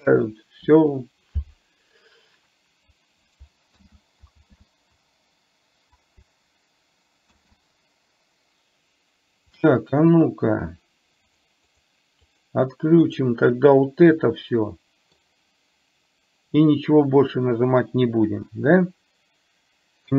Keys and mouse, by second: 3.9 ctrl+z, 11.4 drag, 12.4 click, 13.1 click, 14.3-15.1 middle drag.